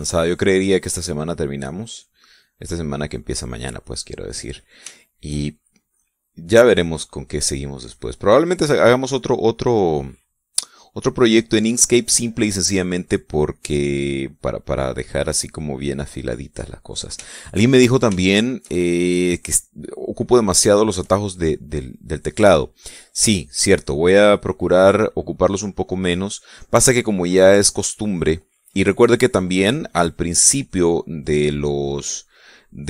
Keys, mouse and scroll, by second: 1.3-3.6 drag, 4.1-5.4 drag, 5.7 shift+click, 6.7 shift+click, 6.7 shift+middle click, 7.4-8.4 drag, 8.6-9.8 drag, 10.0 middle click, 11.4-12.8 middle drag, 12.9 shift+middle click, 13.5 shift+middle click, 14.3-15.3 drag, 15.4 click, 16.3 click, 17.1 click, 18.0-18.7 shift+middle drag, 18.8-21.4 shift+middle drag, 21.5 shift+middle click, 23.5 click, 26.2-28.6 drag, 28.8 click, 29.6-31.8 drag, 32.0-32.8 drag.